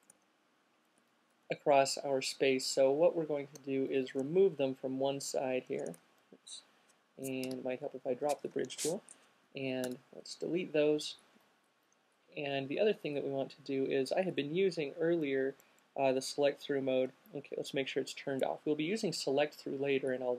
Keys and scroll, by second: 0.4 alt+super+z, 5.7 shift+super+z, 7.7 shift+super+q, 9.8 alt+shift+super+z.